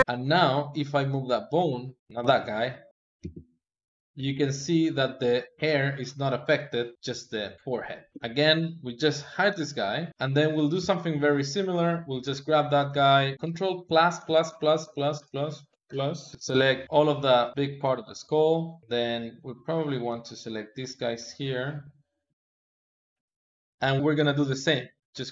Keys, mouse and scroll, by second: 0.0 Tab, 0.5 click, 0.9-2.0 middle drag, 2.0 click, 3.0 g, 8.1 Tab, 9.3 h, 10.0-11.5 middle drag, 11.5 click, 11.8-13.3 middle drag, 13.3 KP_Add, 14.0 ctrl+KP_Add, 14.3 ctrl+KP_Add, 14.6 ctrl+KP_Add, 15.0 ctrl+KP_Add, 15.5 ctrl+KP_Add, 16.3-18.0 middle drag, 18.0 KP_2, 18.8 shift+middle click, 19.6 ctrl+shift+click, 20.1-21.9 middle drag, 21.9 shift+click, 22.0 middle click, 22.5 ctrl+click, 22.7 middle click, 23.3 ctrl+click, 23.4 middle click.